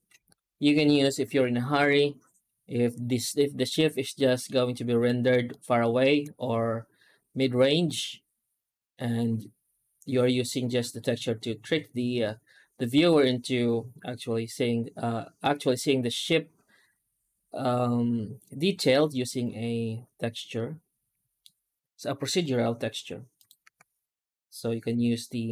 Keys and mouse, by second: 3.7 Tab, 4.3-4.9 middle drag, 5.3 shift+middle click, 7.3-10.8 middle drag, 15.3-21.3 middle drag, 23.2 right click, 23.5 Tab, 24.8 u.